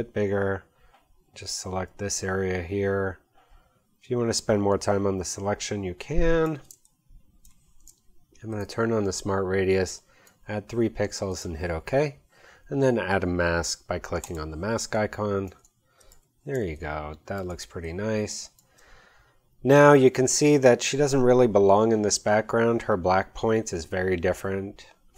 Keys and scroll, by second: 6.6 space, 14.7 space, 16.1 v, 16.5 space.